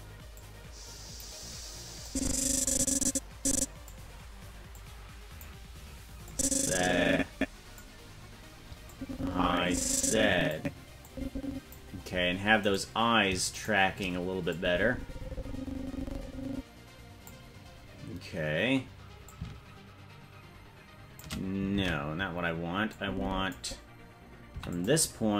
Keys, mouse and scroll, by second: 0.3 click, 2.0-3.9 drag, 4.7 click, 6.2-7.8 drag, 8.9-10.5 drag, 11.0 click, 12.9 right click, 13.8 shift+right click, 14.5-17.3 drag, 19.2-21.2 shift+drag, 22.1 ctrl+z, 22.9 click, 24.5 i.